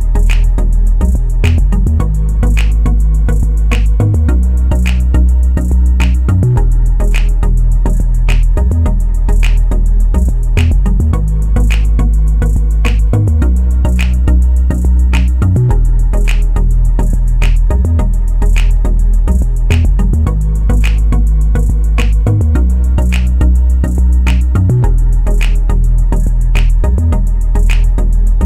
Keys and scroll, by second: 1.7 2, 2.0 Return, 8.2 1, 8.6 ., 10.1 5, 10.5 Return.